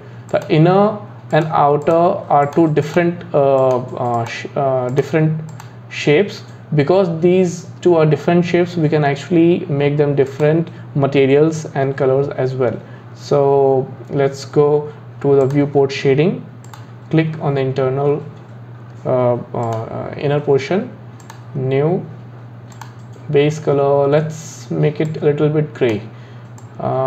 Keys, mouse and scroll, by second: 0.3 click, 1.3 click, 1.8 click, 2.4 click, 2.8 click, 3.6 click, 4.1 click, 4.9 click, 5.5 click, 10.3 click, 13.4-14.8 scroll down 3, 15.8 drag, 16.7 click, 19.7 click, 21.2-22.9 drag.